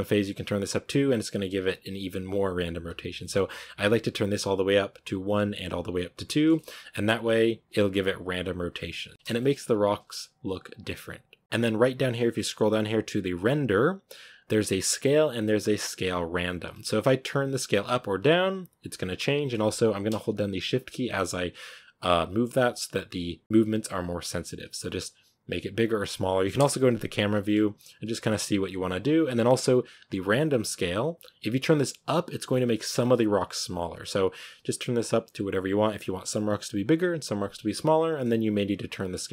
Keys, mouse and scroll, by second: 3.1-6.7 middle drag, 6.7-7.1 scroll up 2, 7.6 click, 8.8 click, 9.1-9.5 shift+middle drag, 9.5-10.2 scroll up 3, 9.9 shift+middle click, 17.1-19.0 drag, 20.5-23.4 shift+drag, 26.4 KP_0, 27.2-28.9 shift+middle drag, 28.9-32.9 shift+drag, 38.9-39.3 shift+drag.